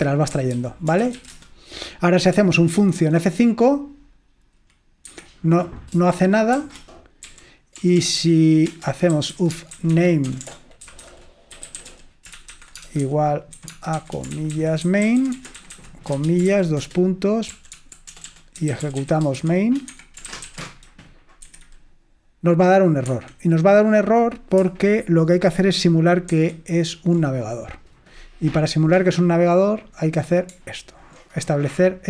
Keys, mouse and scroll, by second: 0.3-2.0 typing, 2.9 F5, 5.2 Escape, 6.6-21.0 typing, 8.8 Return, 23.2 Escape, 26.4 super+8, 29.0 click, 29.8 click.